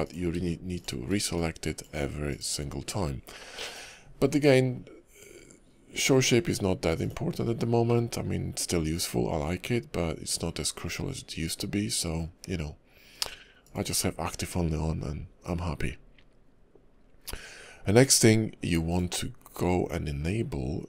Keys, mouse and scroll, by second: 0.0 click, 0.7 shift+click, 1.3 click, 2.8 scroll down 1, 3.6 click, 7.9 middle click, 13.6 click.